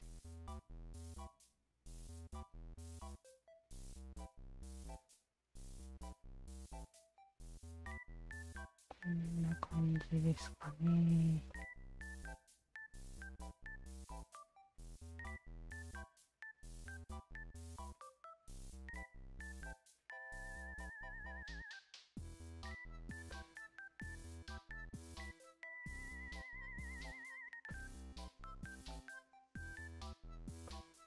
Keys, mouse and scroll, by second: 0.5-4.6 drag, 5.8 w, 6.5 alt+click, 7.3 e, 8.3-9.3 drag, 8.3 w, 9.9 w, 10.5-11.2 drag, 11.5-17.4 alt+drag, 18.2 Tab, 18.8-23.0 alt+drag, 23.3 alt+click, 24.2 alt+click, 25.5 alt+click, 26.3-27.5 alt+drag, 27.7 alt+click, 28.9 alt+click, 29.4 Tab, 29.8 alt+right click, 30.7 click.